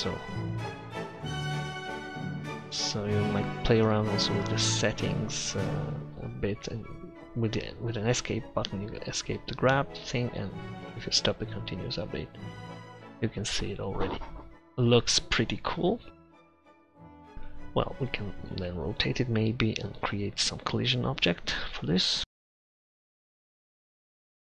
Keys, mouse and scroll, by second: 10.5-12.2 drag, 11.6-13.4 middle drag, 11.6 right click, 18.5 r, 21.8 middle click, 22.4 click, 22.5 shift+a, 22.9 Tab, 23.5 ctrl+z, 23.7 e, 23.9 Tab.